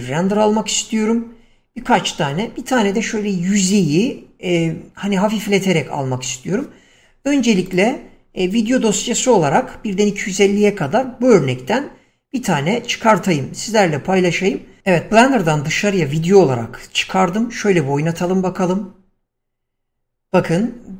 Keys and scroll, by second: 6.5 Escape, 18.5 space.